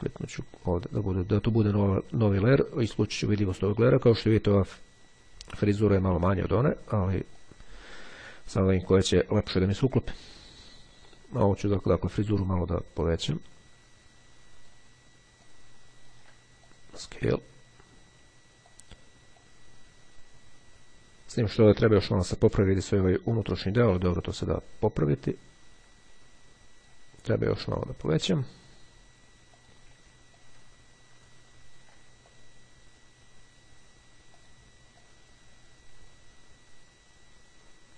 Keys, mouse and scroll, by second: 0.5 click, 3.1 click, 7.5-9.3 drag, 11.7 click, 13.3-15.3 ctrl+drag, 15.5-16.7 drag, 18.8 click, 24.7-27.5 drag, 29.7 ctrl+click, 30.5-32.9 ctrl+drag, 34.5-37.9 drag.